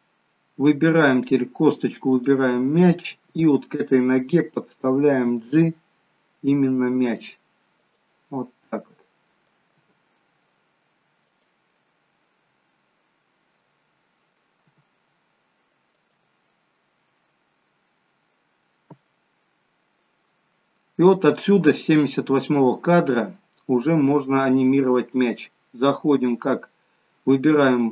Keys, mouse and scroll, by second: 1.2 click, 2.0 shift+click, 5.2 g, 8.4 middle click, 9.7 g, 11.8 middle click, 13.6 middle click, 14.6 g, 16.5 middle click, 18.9-19.9 scroll down 3, 20.5-21.2 scroll down 1, 22.3-23.0 scroll up 2, 23.4 scroll up 1, 23.5 middle click, 27.6 click.